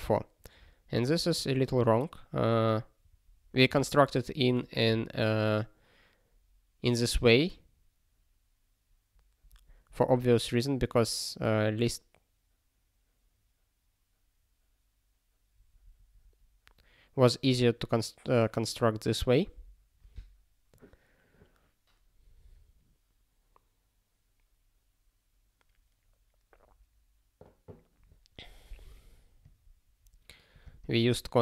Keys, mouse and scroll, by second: 0.9 click, 1.5 ctrl+p, 9.5 scroll up 1, 11.0 scroll up 1, 15.4 scroll up 1, 29.4 click, 30.5 click, 30.6 click, 30.8 double click.